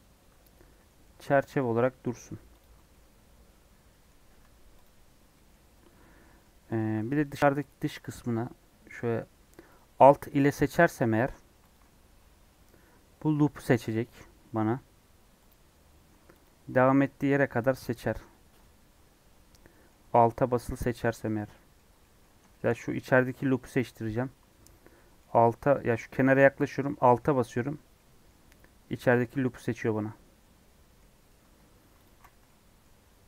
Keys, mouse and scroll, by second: 1.7 scroll up 2, 2.6 alt+click, 2.9-4.3 middle drag, 4.3 Tab, 4.4 scroll down 2, 4.7 click, 4.9 scroll up 1, 5.2 middle click, 5.6 Tab, 6.1-7.1 middle drag, 7.1 alt+click, 7.3 middle click, 7.7 scroll up 2, 8.7 scroll down 2, 8.9 middle click, 9.7 alt+click, 14.5 middle click, 15.5 click, 18.2-20.7 middle drag, 20.7 alt+click, 21.3 middle click, 22.2 scroll up 1, 22.5 shift+middle click, 22.8-23.6 scroll up 1, 23.6 scroll down 1, 23.7-25.2 middle drag, 25.2-25.6 scroll up 6, 27.3-27.9 scroll down 7, 27.9-30.9 middle drag, 30.9-31.4 scroll up 2, 32.0 alt+click, 32.4 middle click, 33.1 e.